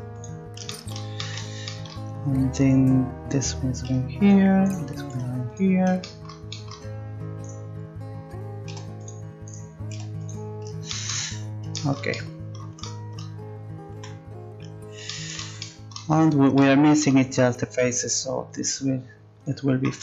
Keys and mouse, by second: 2.6-4.2 right drag, 3.9 g, 4.6 right click, 5.1 g, 8.7 g, 9.9 g, 14.0 z, 14.4 middle click, 18.5-20.0 drag.